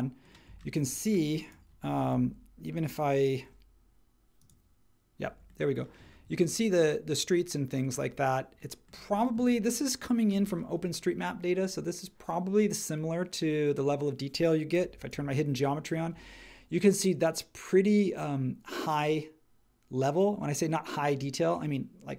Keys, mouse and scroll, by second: 15.1 j.